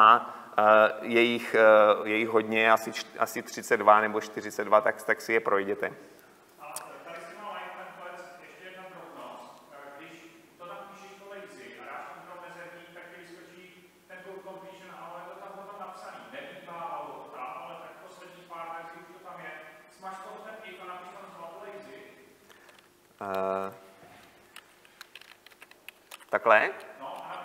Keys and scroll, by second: 26.1 Delete.